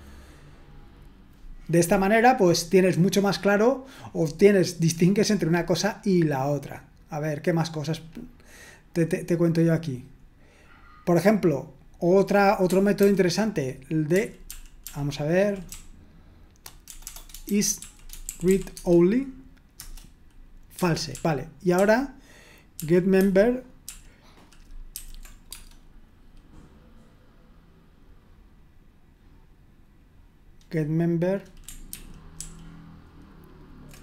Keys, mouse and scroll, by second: 6.5-7.5 scroll down 1, 7.6-8.4 scroll down 1, 8.9-9.5 scroll down 1, 9.5-10.4 scroll down 1, 10.4-11.2 scroll down 1, 12.1-14.1 drag, 13.0 ctrl+p, 14.1 ctrl+p, 14.4 ctrl+p, 14.9 ctrl+p, 15.7-19.0 typing, 19.7 Return, 21.1 ctrl+p, 21.7 ctrl+p, 22.7 ctrl+p, 24.9 ctrl+p, 25.5 ctrl+p, 31.9 ctrl+p, 32.4 ctrl+p.